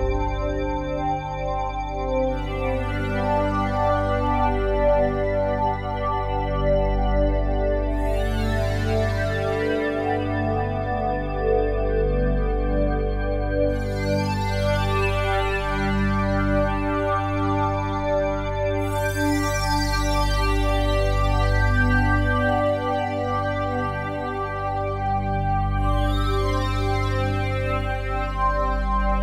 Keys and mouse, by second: 6.6-7.7 drag, 7.7 ctrl+s, 9.3 click, 10.6 click, 13.1-15.5 drag, 16.7-18.5 drag, 20.1 click, 20.6 click, 21.0 click, 21.8 click, 23.9-25.1 drag, 25.8 click, 27.8-28.9 drag, 28.9 ctrl+s.